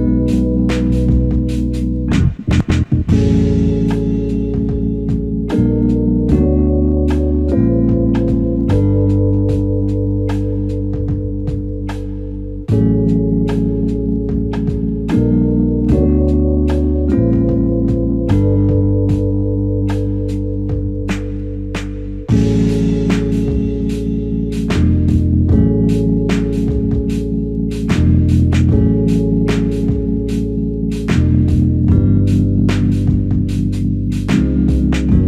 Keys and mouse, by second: 3.3 shift+click, 9.4 alt+click, 11.4 alt+click, 12.4 alt+shift+click, 14.1 shift+click, 15.0 ctrl+click, 15.9 shift+click, 16.8 shift+click, 19.7 space, 30.1 space, 32.5 alt+click.